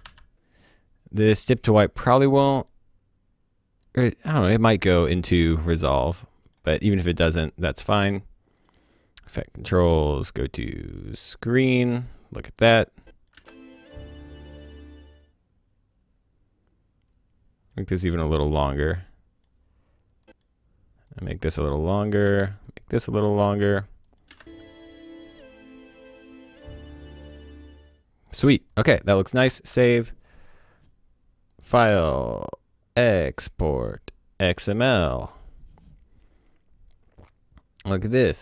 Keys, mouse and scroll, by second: 0.0-0.5 typing, 1.8 click, 11.2 click, 13.3 space, 17.1 click, 24.3 space, 28.7 click, 29.3 ctrl+s, 29.5 click, 31.5 click, 33.7 click, 36.0 click.